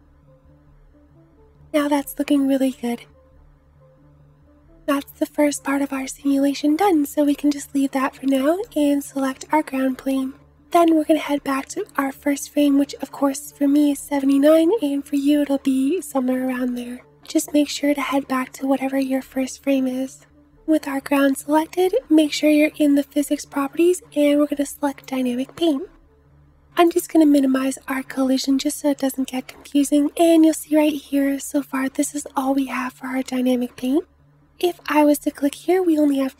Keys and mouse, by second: 0.5-8.8 middle drag, 4.7 space, 8.8-24.6 drag.